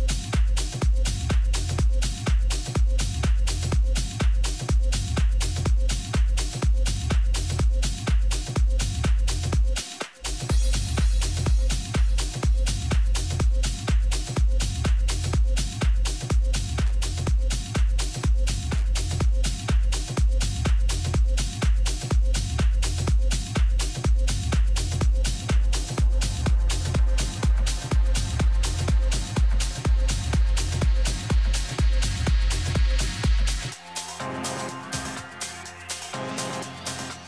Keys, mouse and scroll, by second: 1.2 Tab, 2.0 Tab, 2.5 a, 2.8 a, 3.2-5.2 right drag, 4.4-6.4 drag, 6.2 right click, 7.9-12.0 middle drag, 13.4-20.0 drag, 22.2-25.0 middle drag, 26.4-28.8 drag, 34.2-36.0 drag.